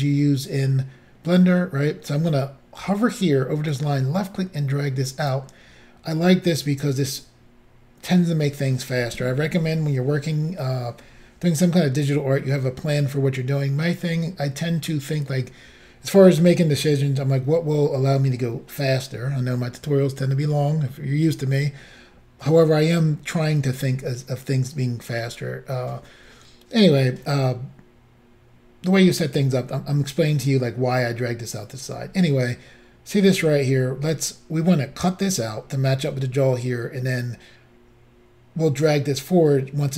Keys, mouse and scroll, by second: 3.8 click.